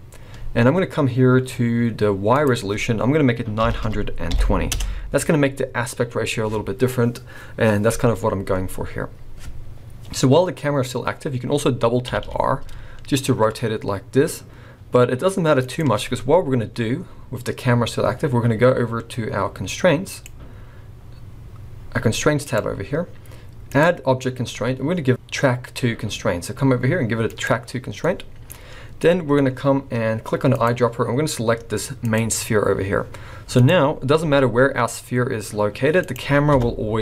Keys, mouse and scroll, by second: 2.4 click, 11.4 scroll up 2, 12.1 r, 16.3-19.0 scroll down 1, 19.0-19.4 scroll down 1, 20.1 click, 22.5 click, 23.7 click, 27.9 scroll down 3, 28.0 middle click, 28.5-29.0 scroll down 4, 29.0 middle click, 29.5 scroll up 2, 30.6 click, 33.8-34.2 scroll down 3, 34.2 g, 36.5 KP_0.